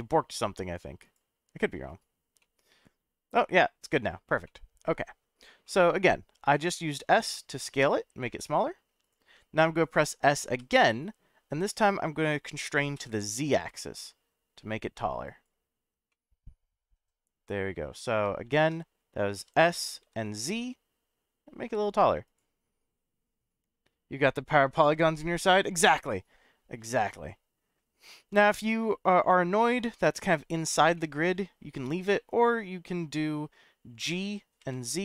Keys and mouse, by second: 2.4-4.1 middle drag, 4.4 middle click, 5.7 middle click, 6.4 s, 9.0 click, 10.6 s, 13.0 z, 15.2 click, 16.1-17.9 middle drag, 18.4 ctrl+z, 19.4 s, 20.0 z, 22.3 click, 27.0-29.8 middle drag, 30.9-31.4 middle drag, 32.1-33.4 middle drag, 34.0 g, 34.6 z.